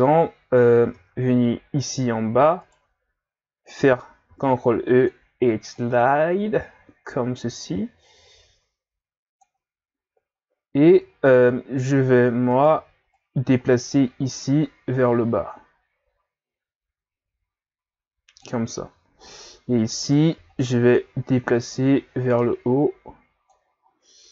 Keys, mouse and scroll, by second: 0.9 Tab, 2.6 alt+right click, 4.3 ctrl+e, 9.9 ctrl+scroll down 1, 11.2 ctrl+scroll down 1, 11.6 z, 12.5 right click, 12.8 b, 14.6-17.7 drag, 19.2-20.0 scroll up 3, 20.0 right click, 20.4 b, 21.6-23.8 drag, 23.8 ctrl+scroll up 4.